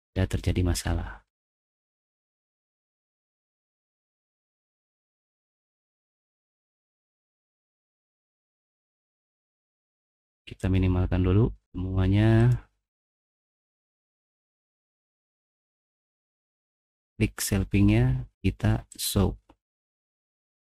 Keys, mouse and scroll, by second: 0.1-0.4 scroll up 1, 0.8 scroll up 1, 1.3-2.4 scroll down 3, 2.6 middle click, 2.6 click, 2.8 middle click, 2.8 click, 2.9 middle click, 3.0 click, 3.2 middle click, 4.1-4.6 scroll down 1, 4.4 middle click, 4.7 click, 7.1 click, 10.6 click, 12.4 click, 12.8-13.4 scroll up 2, 14.0 click, 14.6 scroll up 1, 15.4 click, 17.0 click, 19.0 click, 19.9 middle click, 20.2 middle click, 20.6 click.